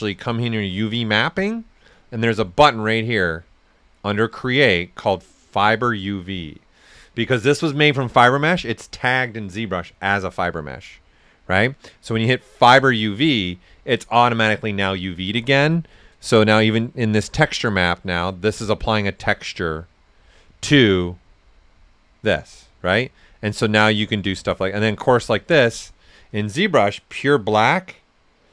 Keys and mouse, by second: 0.0-0.6 typing, 0.3 shift+click, 4.0 click, 12.5-18.4 drag, 12.5 typing, 14.8-15.5 typing, 20.8 click, 21.7 right click, 23.2 click, 25.4-28.5 right drag.